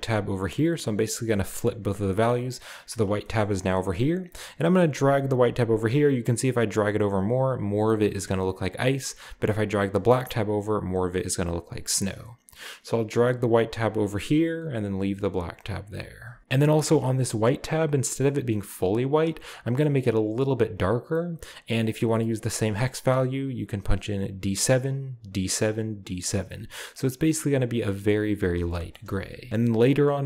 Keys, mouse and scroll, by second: 0.4-1.5 drag, 2.1-2.4 drag, 3.3 middle click, 3.4-4.0 scroll up 1, 4.0 scroll up 1, 4.2-9.1 drag, 9.9-11.6 drag, 13.1-14.6 drag, 15.9 click, 28.7-29.3 shift+middle drag, 29.3 shift+scroll down 1, 29.8-30.2 drag.